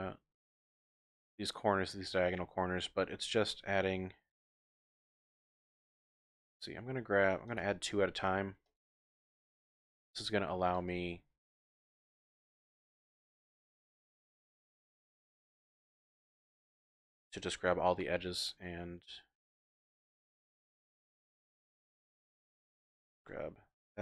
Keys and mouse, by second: 2.2 middle click, 3.3 ctrl+r, 7.6 click, 7.7 typing, 8.0 ctrl+r, 8.8 click, 9.0 ctrl+r, 9.7 click, 10.0 ctrl+r, 10.8 click, 11.0 ctrl+r, 12.8 click, 13.3 shift+middle click, 13.6 shift+click, 14.3 ctrl+r, 15.3 click, 16.1 ctrl+r, 16.9 click, 17.7 2, 19.6 middle click, 20.3 click, 20.4 middle click, 20.5 click, 22.8 2, 23.2 alt+click.